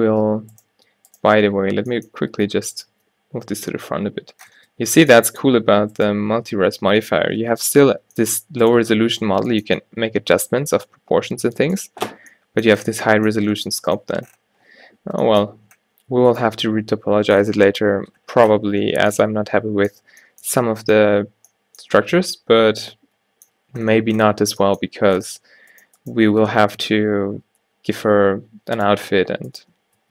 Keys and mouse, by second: 0.2 Tab, 0.8 Tab, 1.9 g, 3.0 Tab, 4.7 Tab, 4.9 g, 5.6 Tab, 6.1-7.7 drag, 7.7 Tab, 8.3 g, 9.3 Tab, 16.4-18.3 drag, 24.4-24.8 middle drag, 25.8-28.9 middle drag, 28.9-30.1 drag.